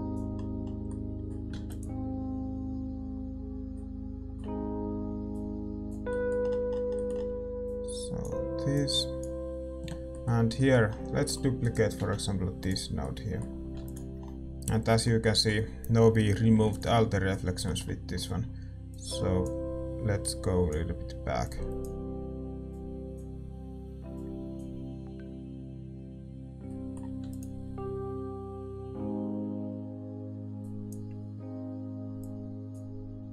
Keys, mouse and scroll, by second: 1.1-2.9 middle drag, 2.9 ctrl+s, 3.8-12.6 middle drag, 12.6-14.6 drag, 12.6-14.6 right drag, 12.6 shift+d, 14.6 ctrl+s, 14.6-17.3 middle drag, 17.3 ctrl+s, 18.9-26.7 drag, 28.2 ctrl+s, 30.6-33.3 drag.